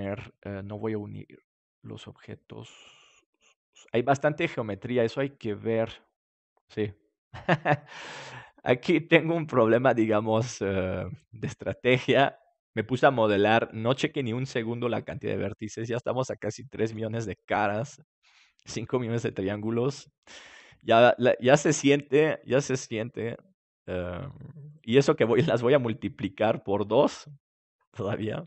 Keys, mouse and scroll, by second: 0.6-3.8 drag, 16.8 ctrl+s, 21.0-22.1 right drag, 22.4-24.3 drag, 27.6-28.4 drag.